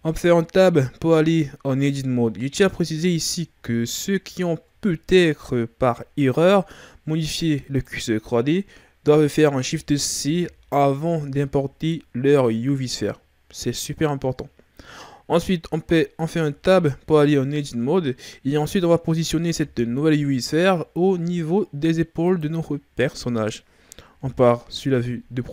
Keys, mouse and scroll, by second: 0.0 Tab, 2.5 Tab, 3.5-3.8 ctrl+scroll down 2, 4.3-7.4 shift+scroll up 3, 7.7 click, 10.2 shift+c, 11.3-11.9 shift+scroll down 2, 11.9-13.8 scroll up 1, 13.8-14.5 ctrl+scroll up 1, 15.5-16.5 ctrl+scroll up 2, 16.5 Tab, 17.4-19.6 ctrl+scroll up 2, 19.6 g, 24.2 KP_3.